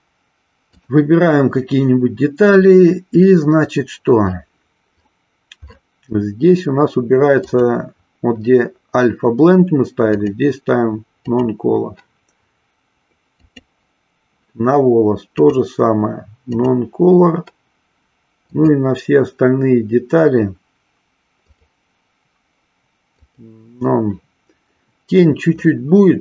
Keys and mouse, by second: 7.4-8.6 drag, 10.2-11.4 drag, 13.4 click, 15.3-16.8 drag, 18.7 click, 21.6-23.6 drag, 25.9-26.2 middle drag.